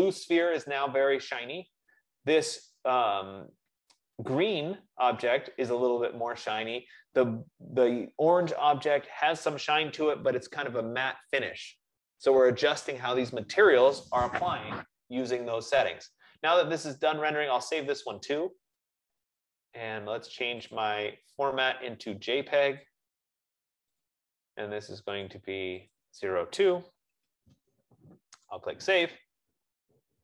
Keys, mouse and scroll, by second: 9.8 F15, 18.4 click, 21.1 click, 23.3 click, 24.2 click, 25.4 click, 26.2 click, 27.3 BackSpace, 27.3 BackSpace, 28.8 click.